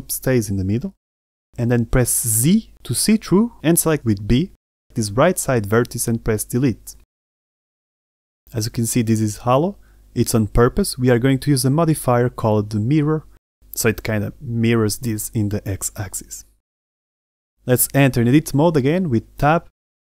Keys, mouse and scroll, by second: 1.5 z, 2.1-4.2 middle drag, 4.7 b, 6.1 Delete, 8.1 middle click, 9.0 Tab, 9.3 middle click, 10.4 z, 10.7 middle drag, 11.2-11.7 scroll up 2, 11.7-12.5 middle drag.